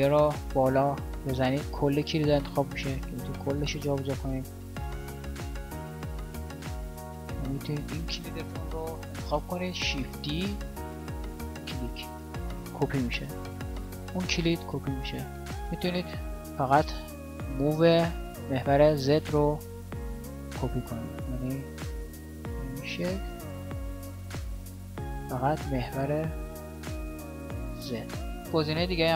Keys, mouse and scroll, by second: 4.8 e, 10.0 shift+d, 21.8 shift+d, 28.4 shift+d.